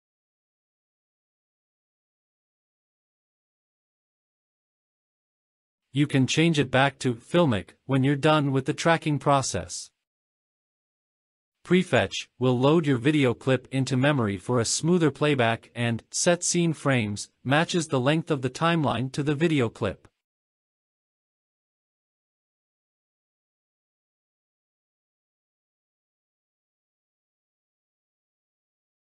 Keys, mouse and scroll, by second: 0.4-1.5 drag, 3.4 click, 3.8-4.5 scroll down 3, 4.6 click, 4.9-5.9 scroll down 2, 5.9-6.7 drag, 8.1-8.6 drag, 10.7 click, 12.0 click, 13.5 space, 14.9-15.3 scroll up 2, 25.6 space, 26.4-28.8 drag.